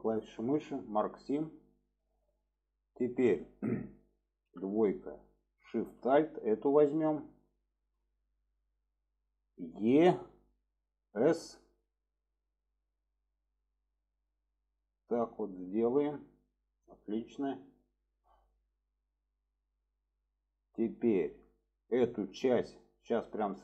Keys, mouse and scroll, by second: 1.0 click, 1.6-2.6 middle drag, 5.5 alt+shift+click, 6.2-7.9 middle drag, 15.7-17.8 middle drag, 18.5-19.7 middle drag, 20.2 scroll up 1, 20.4 middle click, 20.6 scroll down 1, 20.9 scroll up 1, 21.0 middle click, 21.1 scroll down 1.